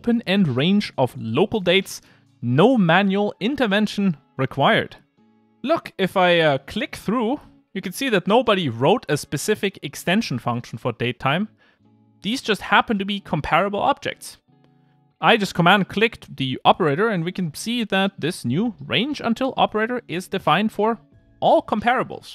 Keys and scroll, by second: 0.2 ctrl+r, 8.6 super+b.